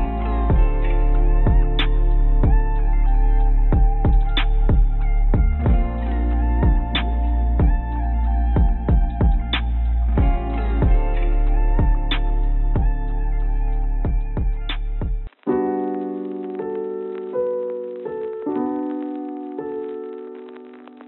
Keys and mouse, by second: 0.5 click, 1.5 Tab, 1.8 a, 2.4 click, 2.8 click, 3.7 shift+d, 6.7 shift+d, 10.8 g, 14.3 g, 17.9 s, 20.0 g.